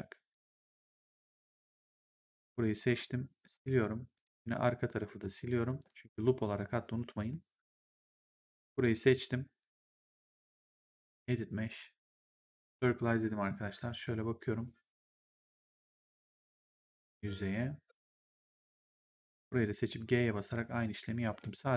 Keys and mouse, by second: 0.2 click, 1.1 shift+click, 3.4 Delete, 4.0 click, 4.3 Delete, 4.6 click, 5.0 Delete, 5.1 click, 5.6 Delete, 5.8 click, 7.1 Delete, 7.6 right click, 8.1 click, 10.5 click, 12.4 click, 19.2 click, 19.9 g, 21.1 e.